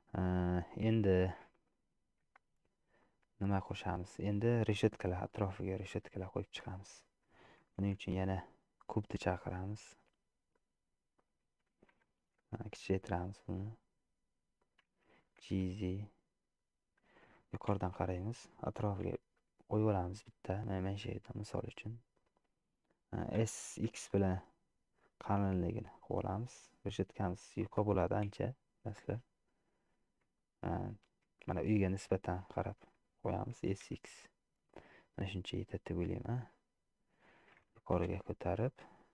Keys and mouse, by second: 1.1 middle click, 3.1 middle click, 4.0 shift+middle click, 6.8 middle click, 7.9 shift+a, 12.7 s, 15.5 g, 17.7 KP_7, 19.2 g, 23.4 s, 28.3 KP_Decimal, 30.5 shift+middle click, 31.5 shift+middle click, 32.7 shift+middle click, 33.8 s, 36.1-37.4 middle drag, 38.1 g.